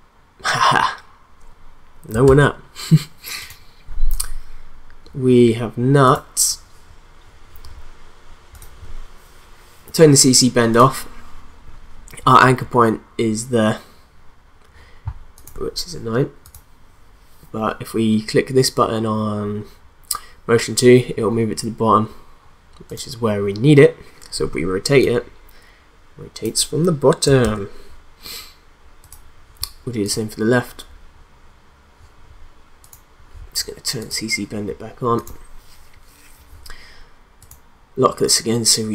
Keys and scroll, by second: 2.2 ctrl+z, 27.4 ctrl+z.